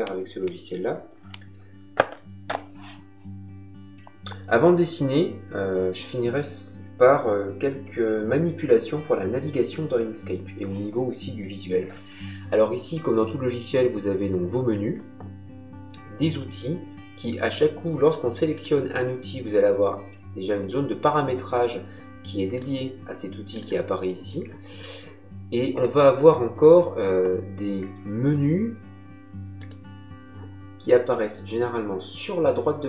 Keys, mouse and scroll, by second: 17.5 click, 22.5 click, 29.5 click.